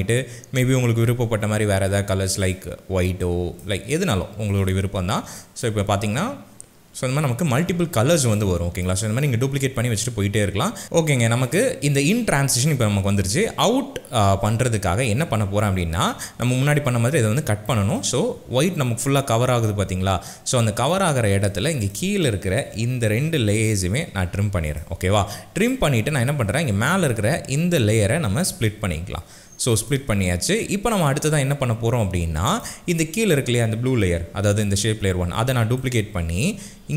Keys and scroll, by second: 5.8 space, 10.8 space, 23.9 alt+], 29.0 ctrl+shift+d, 35.1 ctrl+d.